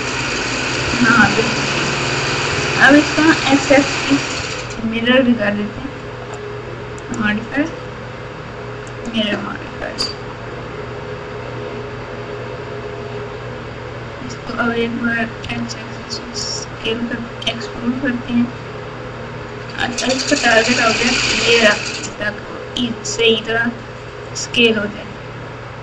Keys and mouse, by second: 1.2 ctrl+KP_4, 1.7 ctrl+KP_4, 1.9 ctrl+KP_4, 2.5 KP_Add, 3.0 KP_Add, 3.1 KP_Add, 4.3-5.0 ctrl+KP_4, 7.0-9.0 drag, 10.0 Tab, 11.3 e.